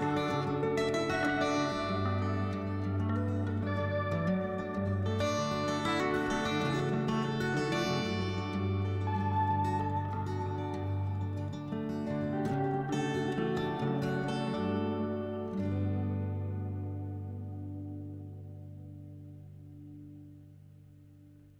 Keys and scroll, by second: 4.4 s, 6.2 s, 6.7 s, 10.2 s, 11.5 s, 16.1 s, 16.8 s, 18.8 2.